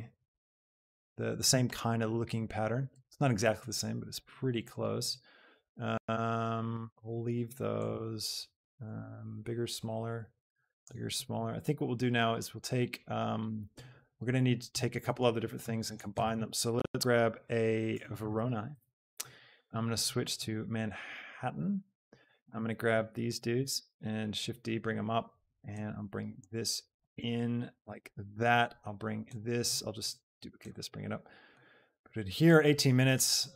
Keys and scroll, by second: 16.2 a, 18.0 o, 18.4 r, 18.7 Return, 23.5 shift+d, 30.5 shift+d.